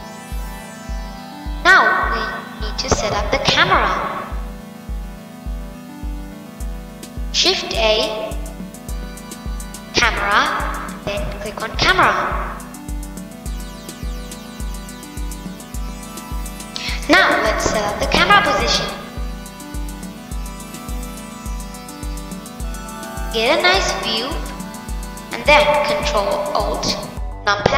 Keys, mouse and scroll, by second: 1.2 scroll up 1, 4.2 click, 4.6-7.1 middle drag, 7.1 shift+a, 12.2-14.6 middle drag, 19.2-22.1 middle drag.